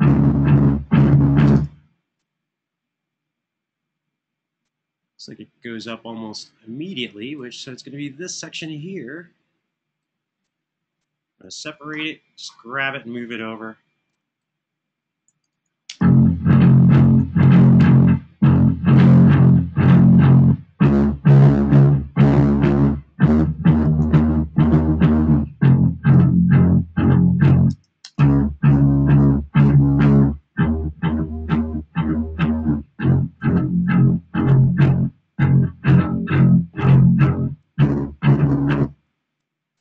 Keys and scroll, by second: 1.2 Right, 1.2 space, 11.3 super+e, 12.5 Home, 15.5 space, 16.9 space, 17.0 super+], 23.7 super+[, 26.5 Home, 27.5 space, 27.9 space, 34.3 super+d, 38.5 space.